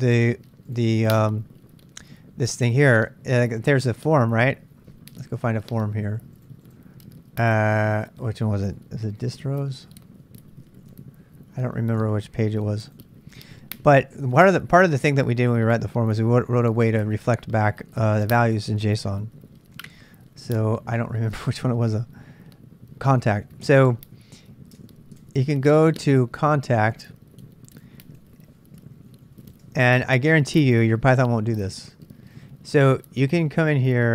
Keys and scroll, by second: 9.0-11.3 typing, 12.0 super+Tab, 13.9-14.6 typing, 14.8 super+Tab, 16.6-17.4 typing, 19.3-21.2 typing, 23.1-25.3 typing, 25.3 super+Tab, 28.5-29.9 typing.